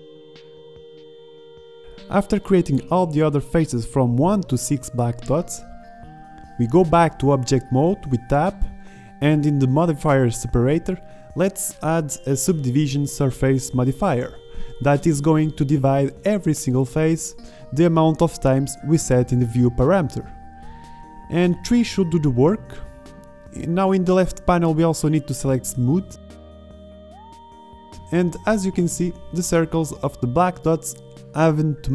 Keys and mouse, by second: 0.1 drag, 0.6 KP_5, 0.9 KP_5, 1.7 alt+e, 1.8 click, 2.8 click, 2.9 middle click, 3.5-4.5 drag, 4.5 ctrl+z, 5.0 middle click, 6.2 middle click, 6.8 z, 7.2 z, 7.5 middle click, 8.7-9.3 middle drag, 10.8 Tab, 29.1-30.9 middle drag.